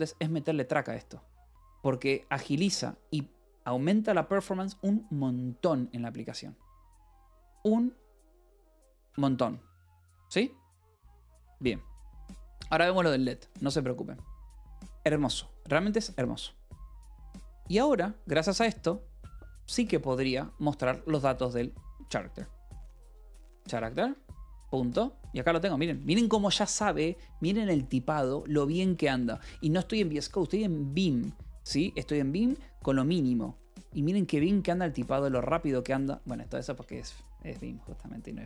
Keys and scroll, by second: 2.3 Escape, 8.0 j, 11.4 a, 21.5-25.0 typing, 26.1 ctrl+n, 29.0 ctrl+n, 35.3 ctrl+n.